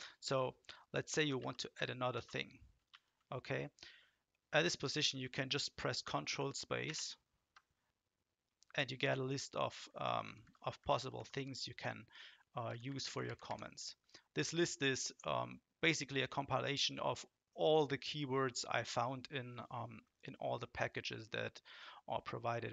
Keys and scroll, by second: 1.4 ctrl+shift+?, 2.1 space, 2.9 :, 6.8 ctrl+space, 9.6 Down, 9.8 Down, 10.0 Down, 10.2-11.3 Down, 12.7 Up, 12.8 Up, 13.0 Up, 13.2 Up.